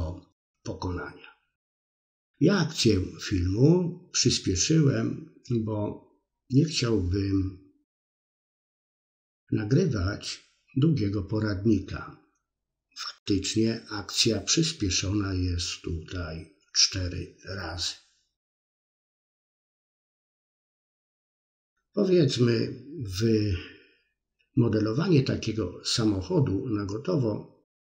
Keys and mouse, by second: 0.0 click, 0.5 middle click, 2.0-3.0 drag, 3.2 click, 4.2-6.1 drag, 6.1 f, 6.2 middle click, 7.2 middle click, 7.6-8.6 drag, 8.7 middle click, 9.6 ctrl+click, 10.4 middle click, 10.8 click, 11.1 middle click, 12.0 ctrl+click, 12.7 middle click, 13.2 click, 14.1 middle click, 14.7 shift+click, 15.6 f, 15.7 middle click, 16.7 shift+middle click, 16.8 middle click, 17.3 middle click, 17.8 click, 18.3 middle click, 18.7 ctrl+click, 19.8 middle click, 20.4 ctrl+click, 21.1 middle click, 22.0 click, 22.5 middle click, 23.1 ctrl+click, 23.7 middle click, 24.2 middle click, 25.2 click, 26.9 middle click, 27.6 shift+click.